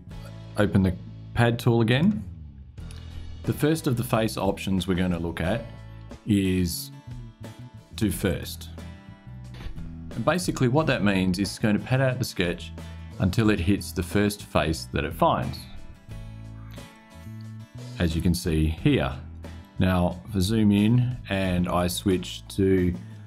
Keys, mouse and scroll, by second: 1.6 click, 8.0 click, 16.6 scroll down 1, 16.7-19.5 drag, 19.5-20.2 scroll up 2, 21.7 click, 23.0 click.